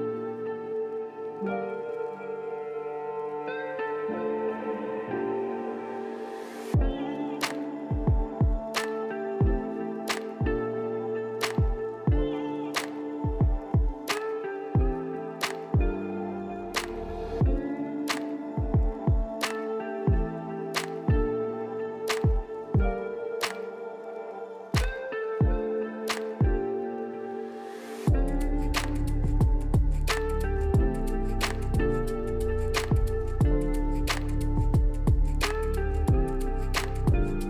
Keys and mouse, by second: 0.3 click, 1.3 drag, 1.9 click, 3.5 f, 3.9 click, 4.5 click, 4.9 ctrl+z, 5.0 click, 5.4 click, 5.6 ctrl+z, 5.8 click, 6.1 click, 7.2 click, 8.0-8.4 drag, 8.6 click, 9.0 drag, 9.3 n, 9.8 click, 10.0 ctrl+z, 10.5 click, 10.8 ctrl+z, 10.8 click, 11.2 ctrl+z, 11.2 click, 11.7 click, 12.4 ctrl+z, 12.5 click, 12.9 ctrl+z, 12.9 click, 13.5 click, 14.2 click, 14.7 ctrl+z, 14.9 click, 15.6 click, 16.1 click, 16.8 ctrl+z, 16.9 click, 17.3 click, 18.1 click, 20.4 click, 21.3 click, 21.8 click, 22.1 click, 22.6 ctrl+z, 23.0 click, 23.3 click, 23.5 click, 23.9 click, 24.3 click, 24.7 ctrl+z, 24.9 click, 25.3 click, 25.6 click, 26.0 click, 26.7 click, 27.0 click, 27.7 click, 28.1 click, 28.4 ctrl+z, 28.5 click, 28.7 click, 28.9 ctrl+z, 28.9 click, 29.5 click, 30.1 click, 30.4 ctrl+z, 30.4 click, 30.8 click, 31.1 click, 32.1 Tab, 32.3 click, 33.1 click, 33.4 click, 33.6 click, 34.0 F3, 34.3 click, 34.6 click, 35.2 click, 35.8 click, 36.3 click, 36.8 click, 37.2 click.